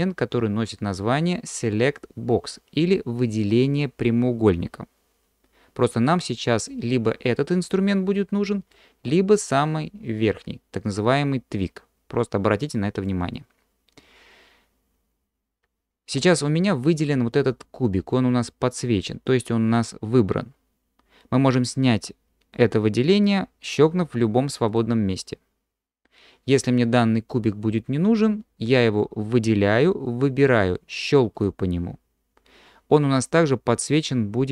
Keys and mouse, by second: 8.7-13.2 drag, 24.7 drag.